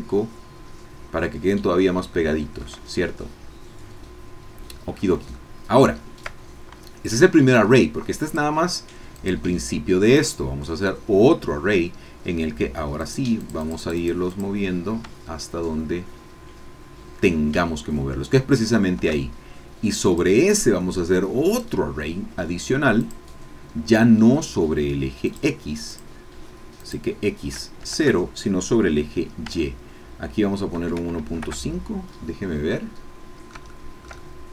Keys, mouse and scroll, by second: 2.2 shift+middle click, 5.4 shift+middle click, 8.3 click, 9.1 click, 10.2 click, 13.0 click, 13.4 click, 14.3 click, 15.2-19.1 shift+drag, 20.0 click, 21.5 click, 23.0 click, 25.2 click, 26.8 click, 27.8 KP_0, 29.8 Tab, 30.7 KP_1, 30.9 KP_Decimal, 31.2 KP_5, 31.4 KP_Enter, 32.7 click, 33.6 shift+middle click, 33.7-34.5 shift+middle drag.